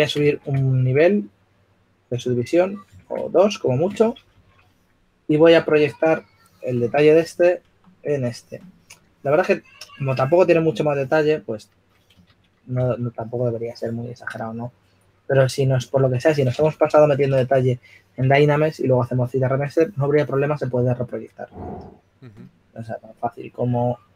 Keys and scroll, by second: 1.1 super+d, 3.8 super+d, 5.1 shift+f, 13.6 shift+f.